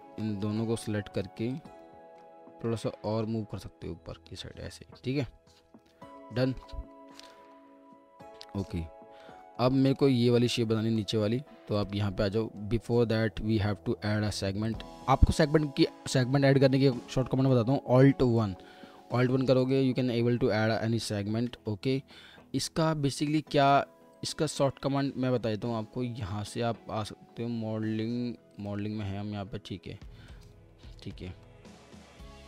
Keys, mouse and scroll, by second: 1.1 ctrl+click, 2.2 middle click, 2.8 alt+middle click, 6.9 scroll down 1, 9.2 alt+middle click, 9.2 alt+middle click, 11.0 alt+middle click, 14.2 2, 14.9 2, 15.0 alt+middle click, 18.4 alt+1, 21.4 ctrl+z, 21.8 w, 22.4 middle click.